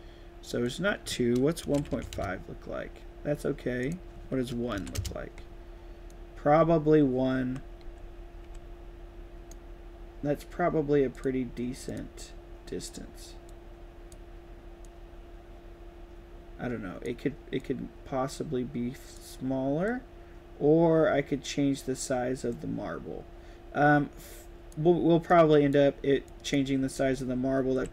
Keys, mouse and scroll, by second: 0.6 click, 6.2-7.9 right drag, 6.3-8.4 typing, 7.9-9.4 drag, 11.1 click, 11.8 click, 13.4-13.8 right drag, 13.8 drag, 14.8-17.0 drag, 17.5-19.1 drag, 19.8-24.7 drag, 25.2-25.6 drag, 26.2-26.6 drag, 26.8-27.9 typing, 26.9 right click.